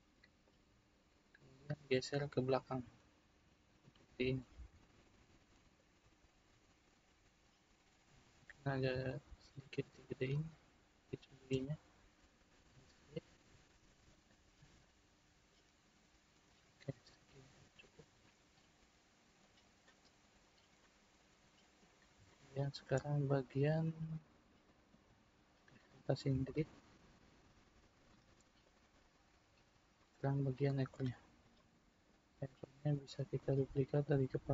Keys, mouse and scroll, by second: 0.4 click, 4.9 click, 9.0 s, 14.8 click, 19.4 click, 20.8-24.3 middle drag, 24.3-24.6 scroll down 1, 24.6-25.8 middle drag, 25.8 click, 26.4 shift+click, 27.3 drag, 28.6 click, 29.2-30.9 middle drag, 30.9 click, 31.5-33.9 middle drag, 33.9 click.